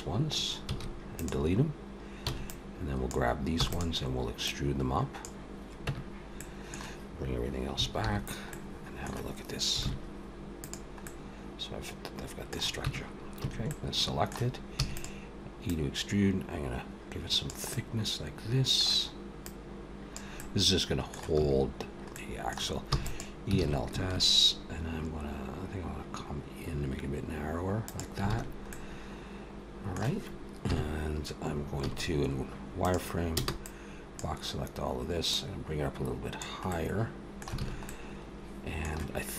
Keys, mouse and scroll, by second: 0.4 x, 2.1 b, 3.4 e, 4.3 click, 5.7 Tab, 6.2 middle click, 7.9 alt+h, 8.3 middle click, 9.6 alt+a, 10.4 click, 10.9 middle click, 12.7 Tab, 13.2 a, 13.5 middle click, 14.6 e, 15.5 click, 17.5 middle click, 19.3 click, 20.2 middle click, 21.2 a, 22.0 middle click, 22.7 e, 23.4 alt+s, 28.1 alt+a, 28.5 middle click, 30.5 KP_1, 31.7 z, 33.2 b, 35.1 click, 36.5 middle click, 37.4 alt+a, 37.7 middle click.